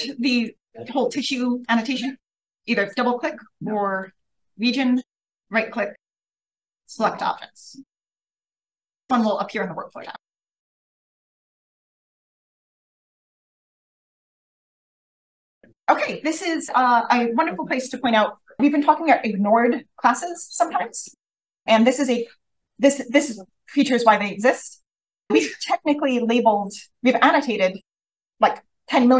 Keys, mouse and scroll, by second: 0.1 click, 0.3 click, 1.5 click, 2.6 click, 2.8-5.5 drag, 5.5 right click, 11.4 click, 12.3 right click.